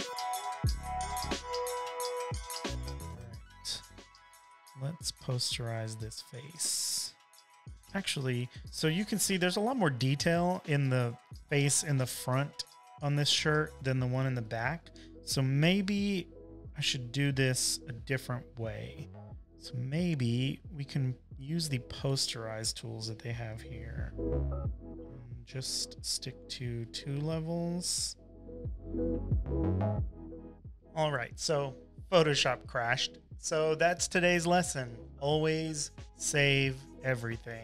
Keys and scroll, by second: 0.0-1.4 typing, 2.8 v, 4.1 super+l, 10.9 z, 12.5 space, 13.0 space, 13.1 space, 16.7 super+-, 16.9 super+-, 17.0 super+-, 17.8 space, 18.4 space, 19.1 v, 27.2 1, 27.9 Tab, 30.8 Return, 30.8 typing, 32.2 v.